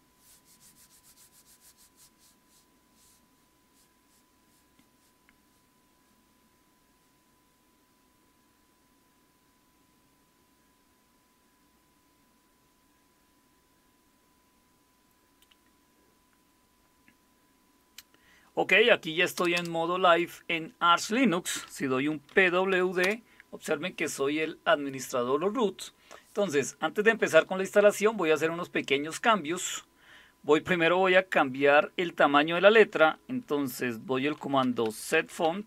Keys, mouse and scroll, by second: 19.4 Return, 19.5 Return, 22.1-23.2 typing, 34.1-35.6 typing.